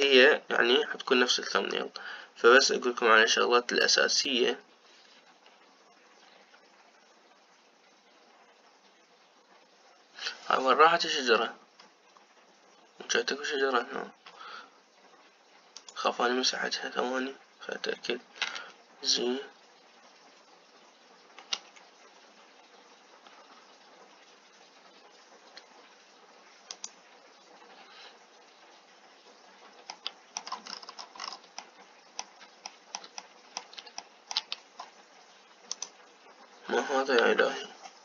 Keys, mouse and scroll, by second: 20.5 z, 24.2 z, 30.9 middle click, 31.4 scroll up 1, 31.5-32.5 scroll down 9, 32.5-35.5 middle drag, 35.5-36.6 scroll up 1, 36.6-38.0 drag.